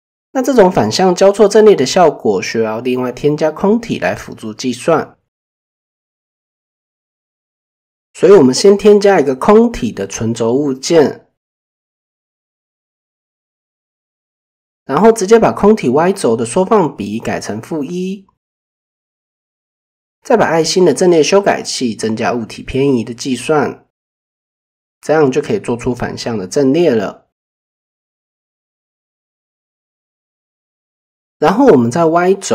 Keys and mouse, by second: 0.7 click, 1.5 middle drag, 3.4 click, 4.5 click, 5.3 click, 16.0-17.2 drag, 20.7 click, 21.1 click, 21.6-22.8 drag, 24.4 shift+middle drag, 29.1 click, 31.1 click, 32.0-32.5 drag.